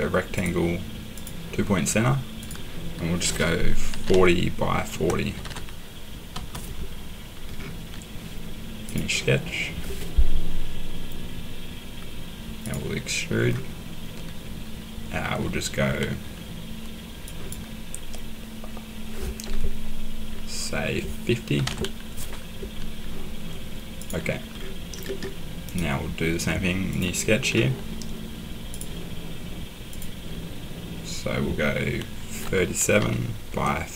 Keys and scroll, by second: 3.9-6.3 typing, 21.3-22.1 typing, 32.4-33.9 typing.